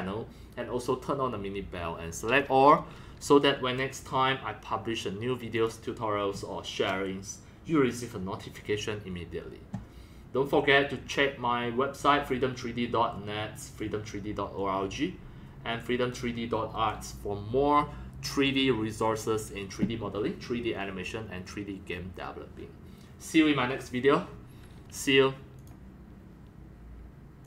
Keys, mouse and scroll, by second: 5.5-10.7 drag, 16.6 click, 25.6 click, 27.4 click.